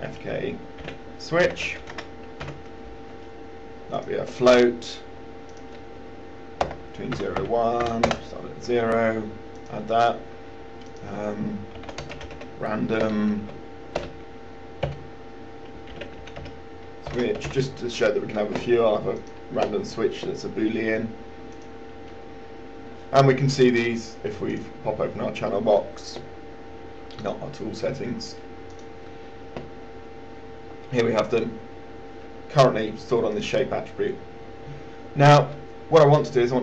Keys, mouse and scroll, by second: 1.7-3.1 typing, 4.2 click, 6.9 KP_0, 7.5 Tab, 7.6 KP_1, 8.1 Tab, 8.3 KP_0, 9.8 click, 12.1 click, 12.3-13.3 typing, 15.2 typing, 16.2-18.2 typing, 19.5 click, 21.9-36.6 drag.